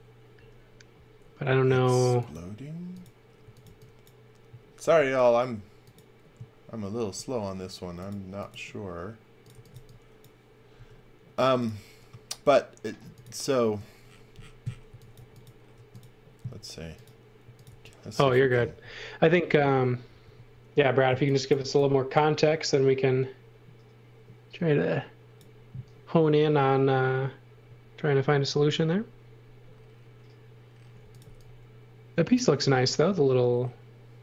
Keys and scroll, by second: 3.2-4.8 typing, 9.2-10.7 typing, 14.8 x, 15.1 v, 15.7 space, 17.1-18.1 typing, 20.2 c, 21.0 x, 21.5 v, 30.7-32.7 typing.